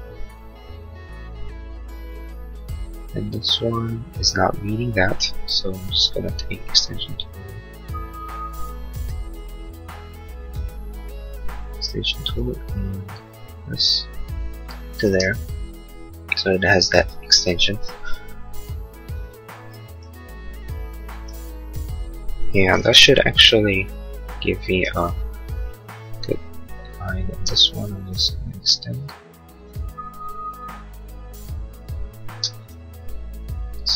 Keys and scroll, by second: 8.9 space, 15.0 space, 22.9 l, 24.8 Escape, 27.5 space, 32.4 space.